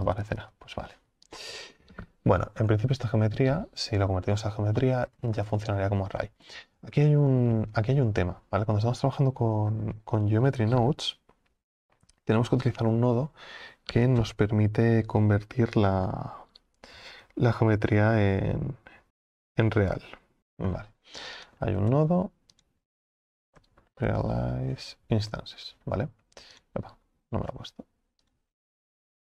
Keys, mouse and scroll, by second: 2.6 scroll down 1, 2.7-4.8 scroll up 5, 4.8-25.3 middle drag.